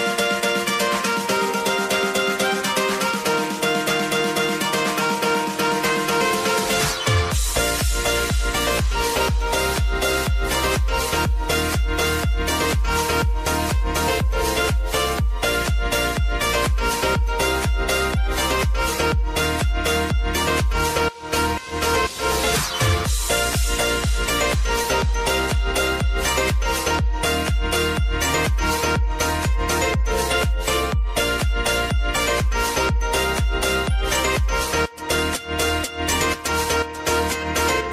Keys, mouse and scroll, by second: 5.1-5.6 scroll up 1, 6.6 click, 9.2-13.1 drag, 13.1 space, 14.9-16.6 drag, 16.6 F9, 17.7-21.2 drag, 21.2-23.2 drag, 24.2 space, 25.9-28.3 drag, 28.6 space, 30.5 space, 30.9 click, 31.4 scroll up 1, 32.8 click, 34.8 ctrl+c, 35.8 click, 37.2-37.6 scroll up 1.